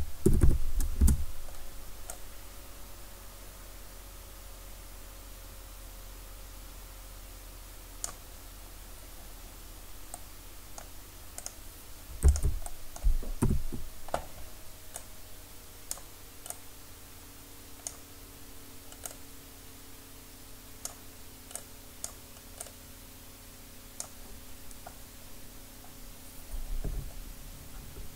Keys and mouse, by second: 2.1-4.0 drag, 11.4 click, 11.5-13.4 right drag, 13.4 KP_1, 15.0-18.4 drag, 19.1-21.1 drag, 21.6-27.5 drag.